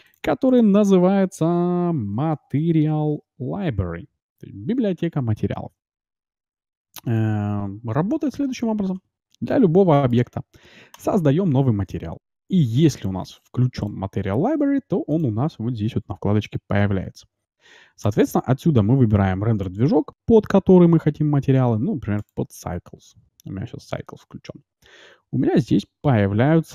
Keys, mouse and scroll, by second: 9.4-11.1 middle drag, 10.8-12.5 drag, 13.0-16.8 drag, 18.0-19.8 drag, 25.2-26.7 middle drag.